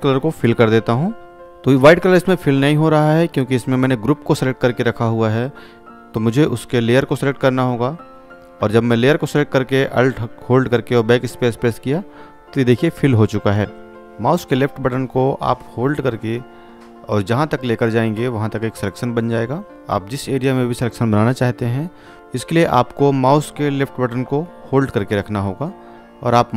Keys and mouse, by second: 5.2 click, 8.0 click, 10.5 ctrl+d, 13.1-13.8 click, 14.8-17.8 drag, 22.1 ctrl+Num_Lock, 25.7 ctrl+space, 26.0 alt+click.